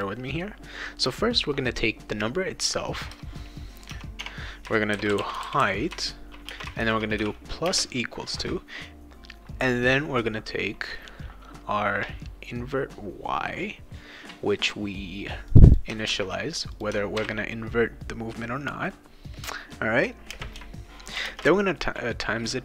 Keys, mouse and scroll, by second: 2.1 click, 3.1 Caps_Lock, 3.9 Caps_Lock, 4.2 Tab, 4.7-7.6 typing, 15.5 click, 16.1 ctrl+c, 16.8 click, 17.2 ctrl+v, 20.3 space, 21.1 shift+8, 21.3 space.